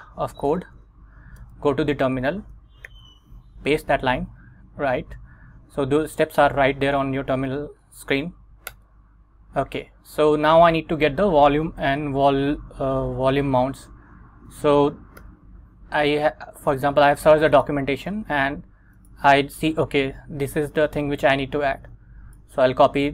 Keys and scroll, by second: 0.7 super+Tab, 1.5 Return, 3.0 super+v, 4.2 Up, 8.8 Return, 13.8 super+Tab, 15.3 Return.